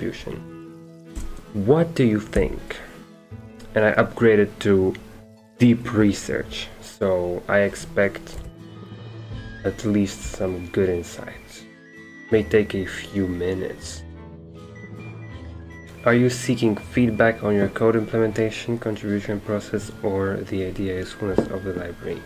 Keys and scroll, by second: 1.2 BackSpace, 2.3 typing, 8.5 ctrl+a, 9.0 ctrl+c.